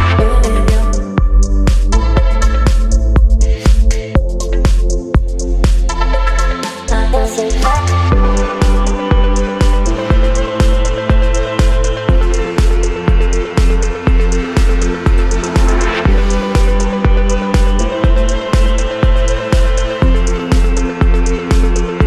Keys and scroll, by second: 0.1 Return, 1.9 e, 3.6 Caps_Lock, 4.0-5.5 typing, 6.9 v, 7.7 ctrl+j, 8.4 ctrl+t, 15.5 Return, 16.0 e, 16.6 ], 18.3 space, 19.5 v.